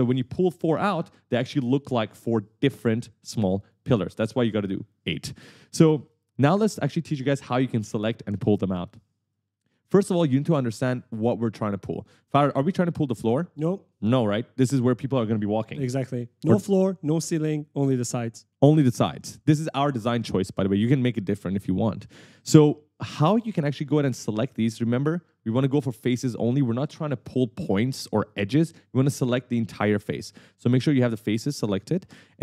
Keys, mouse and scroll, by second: 6.2 click, 6.9 s, 9.4 right click, 9.6 d, 10.7-12.0 typing, 17.8 right click, 18.2-19.3 typing, 18.3 right click, 22.1-23.9 typing, 22.2 right click.